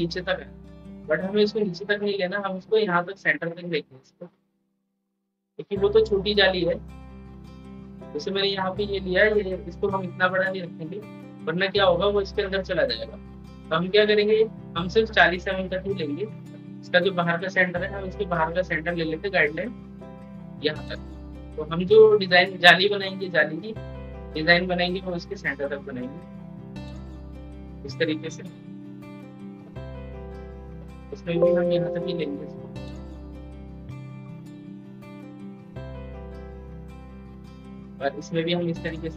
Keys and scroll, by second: 28.9 ctrl+k, 35.7 ctrl+k.